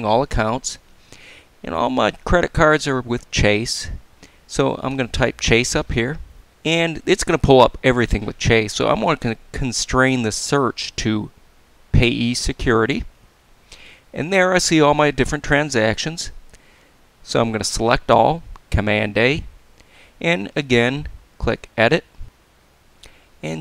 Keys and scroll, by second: 17.6 super+a.